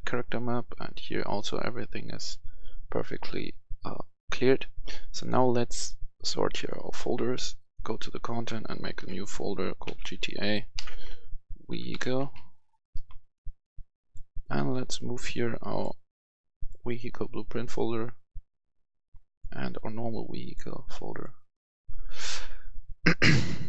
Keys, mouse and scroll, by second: 6.6 right click, 7.5 click, 8.9-12.3 typing, 12.9 Return, 14.0-20.8 drag.